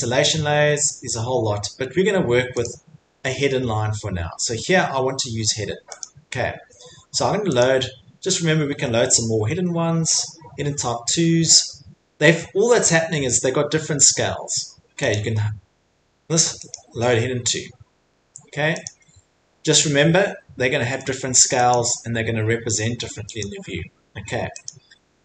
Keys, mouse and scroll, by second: 1.0-1.6 scroll, 2.3 scroll, 2.7 click, 4.2-5.0 scroll, 5.0-5.6 scroll, 6.0 click, 7.6 click, 8.6-10.3 scroll, 15.1 click, 17.7 middle click, 17.7 middle click, 18.0 middle click, 18.8 click, 21.7 click, 24.6 click.